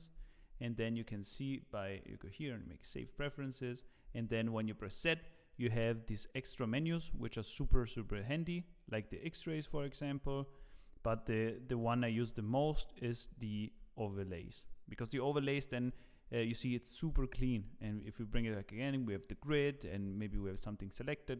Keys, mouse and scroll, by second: 8.6 scroll down 5, 9.0 middle click, 10.6 z, 12.6 z, 14.1 middle click, 14.1 z, 14.5 middle click, 15.8 scroll down 2, 16.1 middle click, 18.1-18.5 scroll down 3, 18.1 z, 18.3 middle click, 19.2 middle click, 19.7 scroll up 4, 20.0 click, 20.5 middle click.